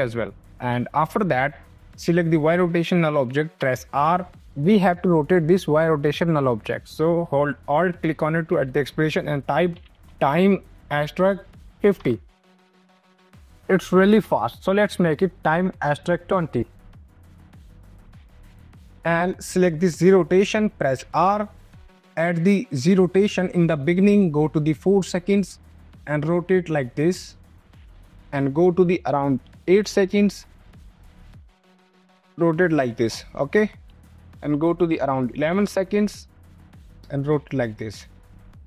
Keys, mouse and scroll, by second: 3.5 r, 4.4 click, 6.8 ctrl+z, 7.9 alt+click, 9.1-13.6 typing, 13.3 click, 14.9 KP_2, 16.3 click, 16.8 space, 18.9 click, 19.9 click, 20.8 r, 22.7 click, 24.0 click, 26.4 click, 28.4 click, 34.2 click, 36.2 click, 38.5 ctrl+z.